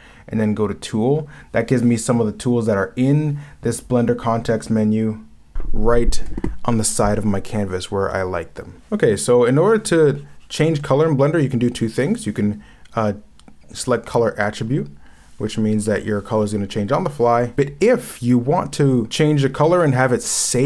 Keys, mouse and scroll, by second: 10.9 ctrl+z, 19.1 ctrl+z.